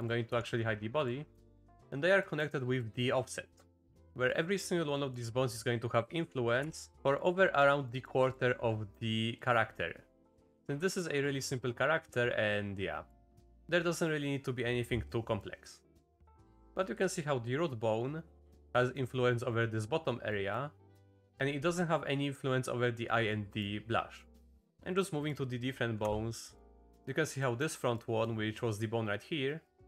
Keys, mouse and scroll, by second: 0.3 h, 1.3 z, 1.7 Tab, 2.2 click, 2.8 click, 4.3 click, 4.9 click, 6.6 Tab, 6.9 alt+h, 7.6 click, 7.8 click, 10.6 click, 13.6 click, 15.4-16.6 drag, 18.7 click, 20.3 click, 22.1 click, 23.3 click, 24.1 click, 24.7 Down, 24.7 click, 26.0 Down, 26.5 click, 27.4 click, 27.9 click.